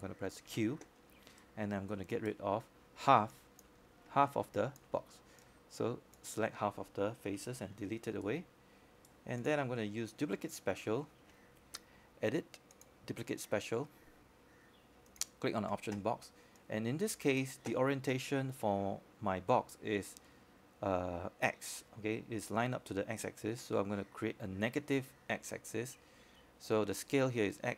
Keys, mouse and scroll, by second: 2.6 click, 7.2 q, 7.7-8.1 scroll down 1, 8.1-9.9 right drag, 10.1 alt+click, 10.6 scroll up 1, 11.1 scroll down 1, 11.3-13.9 alt+drag, 14.2 Delete, 14.6-15.1 scroll up 1, 15.1 right click, 16.3 click, 16.6-17.1 scroll down 1, 17.1-19.7 scroll up 1, 19.7-24.9 drag.